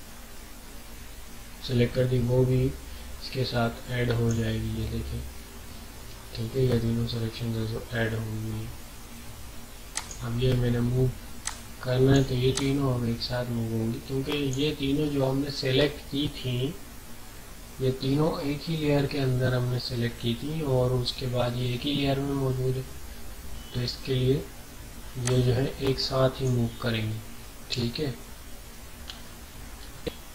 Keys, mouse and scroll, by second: 9.9-17.1 drag, 25.2-28.2 drag, 28.2 ctrl+z.